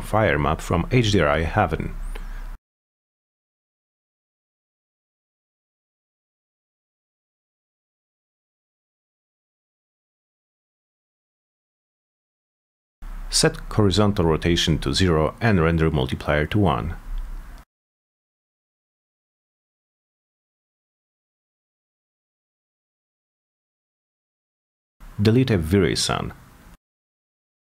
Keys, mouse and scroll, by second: 2.2 click, 4.1 click, 4.9-8.4 drag, 8.8-9.1 scroll down 4, 11.4 click, 12.3 click, 14.0 click, 14.1 click, 15.8 Return, 16.2-16.9 drag, 17.8 click, 18.0 click, 18.9 Return, 20.2 click, 21.9 click, 24.4 click, 25.2 t, 25.6 z, 26.8 click, 27.2 middle click.